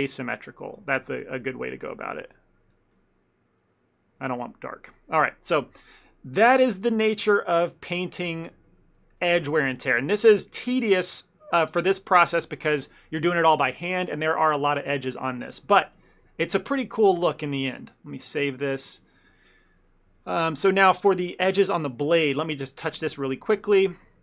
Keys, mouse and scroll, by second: 1.2 click, 1.2 shift+middle click, 2.0 click, 2.2 click, 2.8-3.7 ctrl+click, 3.0 click, 3.7 ctrl+middle click, 3.9 ctrl+middle click, 4.1 shift+middle click, 4.3 ctrl+z, 4.6 ctrl+z, 4.9 ctrl+middle click, 5.2 middle click, 5.4 ctrl+middle click, 5.7 shift+middle click, 5.8 shift+middle click, 6.0 middle click, 6.4 ctrl+middle click, 6.6 middle click, 6.9 shift+middle click, 7.1 shift+middle click, 7.3 ctrl+middle click, 7.6 middle click, 8.4 click, 8.7 click, 9.4 click, 9.5 shift+middle click, 9.8 middle click, 10.2 click, 10.5 click, 11.1 click, 11.1 ctrl+middle click, 11.5 middle click, 11.7 middle click, 11.8 shift+middle click, 12.1 shift+middle click, 12.2 ctrl+middle click, 12.5 middle click, 16.0 click, 16.5 click, 18.6 shift+middle click, 19.0 ctrl+middle click, 19.3 ctrl+middle click, 19.3 shift+middle click, 19.5 shift+middle click, 20.0 middle click, 20.3 shift+middle click, 20.5 ctrl+middle click, 21.5 KP_1, 22.5 ctrl+middle click, 22.9 f, 23.2 ctrl+middle click, 23.8 f.